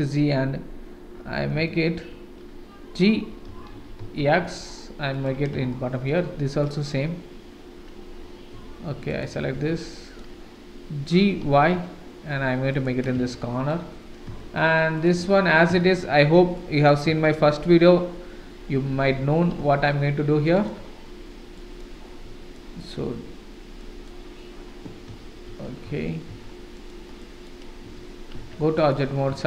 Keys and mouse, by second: 1.7 shift+click, 3.5 g, 5.7 shift+click, 6.7 click, 8.6 Tab, 9.1 click, 9.5 Tab, 9.9 click, 11.2 g, 13.4 shift+right click, 14.4 shift+right click, 15.8 shift+click, 16.6 click, 17.2 shift+click, 18.9 g, 21.5 click, 22.6 click, 23.8 click, 25.1 ctrl+z, 25.5 ctrl+z, 25.9 ctrl+z, 26.3 ctrl+z, 26.8 click, 27.2 click, 28.4 Tab, 28.8 click.